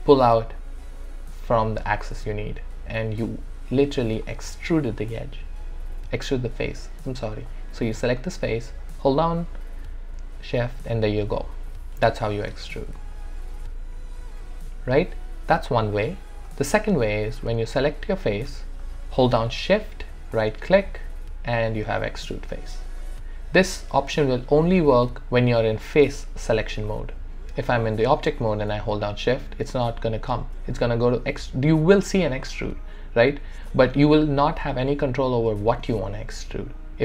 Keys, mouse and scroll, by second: 3.3-7.5 alt+drag, 7.5 click, 8.8-11.7 shift+drag, 12.4 shift+click, 13.1-17.6 alt+drag, 18.0 alt+click, 18.8 alt+middle click, 20.3-26.9 shift+right drag, 29.0-37.0 shift+right drag.